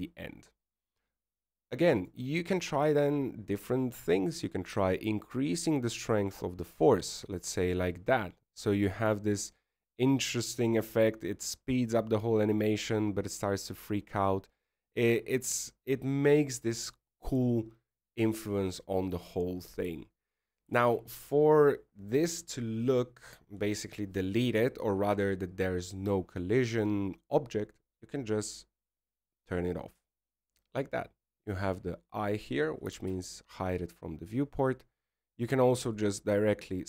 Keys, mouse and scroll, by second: 1.9-2.7 scroll down 2, 4.0 right click, 5.7 click, 6.8 click, 22.8 alt+a, 31.0 click, 35.2 alt+a.